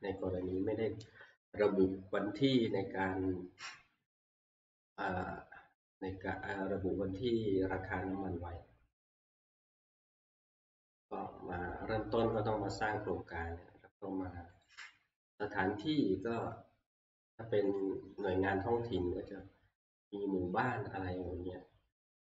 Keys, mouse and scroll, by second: 7.4 click, 11.0 click, 14.6 click, 17.8 click.